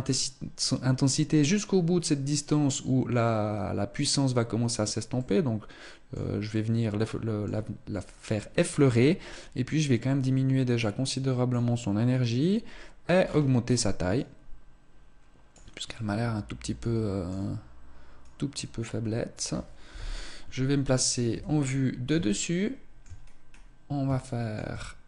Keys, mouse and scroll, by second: 5.0 middle click, 6.3 middle click, 9.1 click, 13.0-14.0 scroll down 5, 14.0 click, 15.7 middle click, 18.0 click, 19.7 KP_7, 21.1 KP_7, 22.4 shift+middle click, 23.0-23.4 scroll down 2, 24.1 shift+middle click.